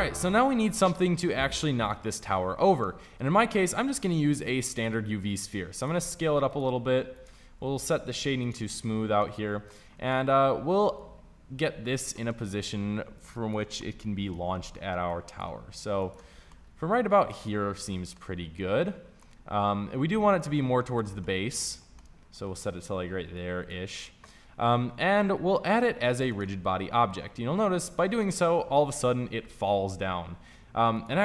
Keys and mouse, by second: 3.1 shift+a, 5.3 s, 5.9 g, 7.1 s, 7.4 t, 8.8 t, 15.9 s, 19.8-31.2 drag.